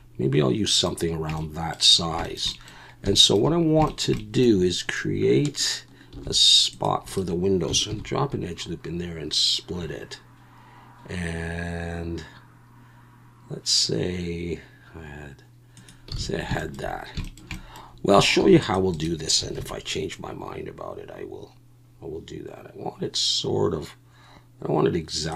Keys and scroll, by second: 6.1 ctrl+r, 7.9 ctrl+b, 16.2 alt+a, 18.4 ctrl+r, 19.6 ctrl+b.